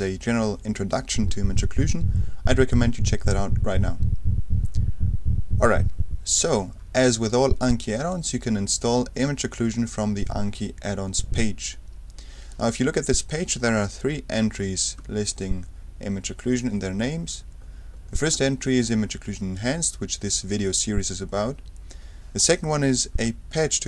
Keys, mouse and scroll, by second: 10.1-10.6 scroll down 2, 15.0 F3, 17.6-18.7 scroll down 2, 23.2 F3.